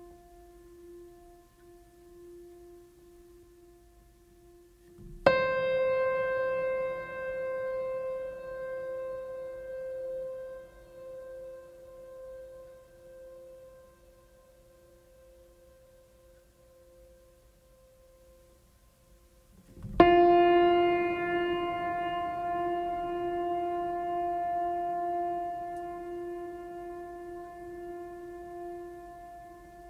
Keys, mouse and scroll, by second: 4.6 click, 9.6 click, 10.6 scroll down 1, 11.7-13.2 drag, 13.8 scroll up 1, 15.5 click, 16.4 right click, 17.0-20.4 drag, 24.4 scroll up 1, 24.8-25.5 scroll down 1, 25.5-26.8 drag.